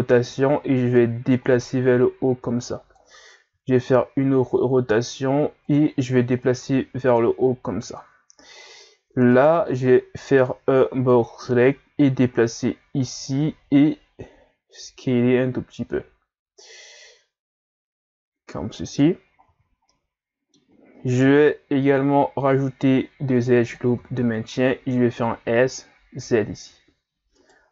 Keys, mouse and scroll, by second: 0.9-3.5 drag, 3.5 r, 6.4-9.3 drag, 9.3 right click, 9.7 b, 11.3-14.3 drag, 14.8 s, 19.5 z, 19.9-21.2 middle drag, 21.2 ctrl+r, 24.0 s.